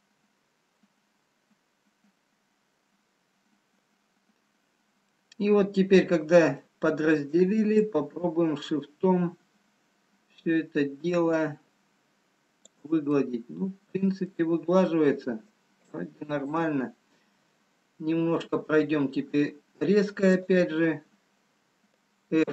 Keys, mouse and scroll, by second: 3.6-4.0 scroll up 10, 5.1 middle click, 5.1-5.5 scroll down 1, 10.0 shift+click, 13.2 middle click, 15.7 middle click, 16.8 shift+click, 20.5 click, 21.9-22.5 scroll up 2.